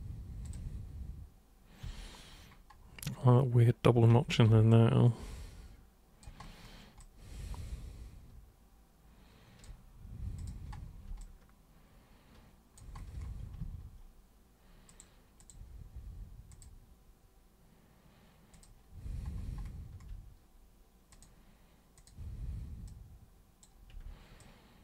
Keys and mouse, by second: 0.4 ctrl+click, 1.8 3, 4.1 1, 4.7-6.2 alt+super+drag, 7.0-9.6 alt+super+drag, 10.4 super+click, 11.2-12.8 alt+super+drag, 14.9 super+click, 15.4 super+click, 16.5 super+click, 18.5 super+click, 21.1 super+click, 22.0 super+click, 22.8 super+click, 24.4 ctrl+shift+super+click.